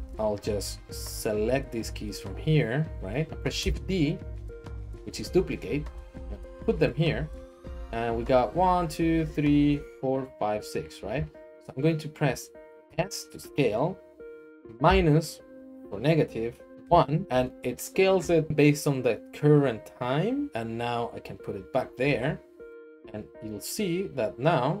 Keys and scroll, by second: 3.3 ctrl+shift+v, 3.6 d, 12.9 s, 14.8 -, 16.8 1, 20.5 Escape, 20.5 g.